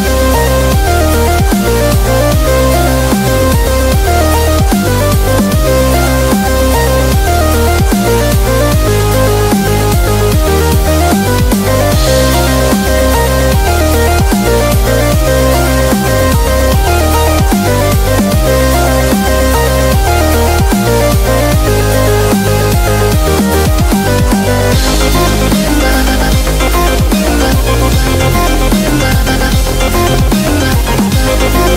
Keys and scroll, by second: 16.0 super+-, 18.2 p, 21.8 super+z, 27.2 5.